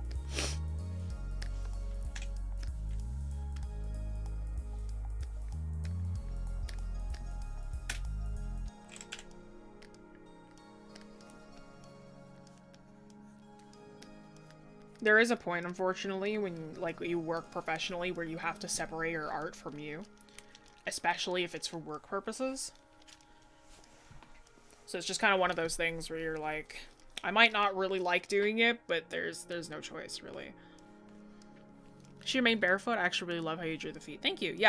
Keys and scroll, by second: 2.1 scroll up 1.